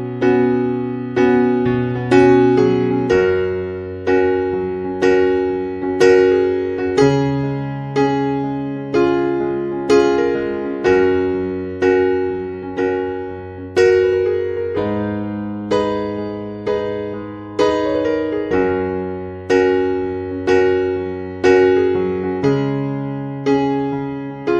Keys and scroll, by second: 5.3 Escape, 17.3 Escape.